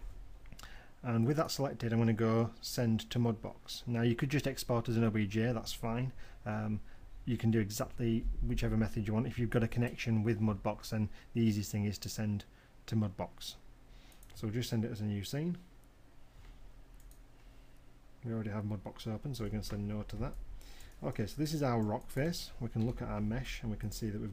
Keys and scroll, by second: 24.0 w.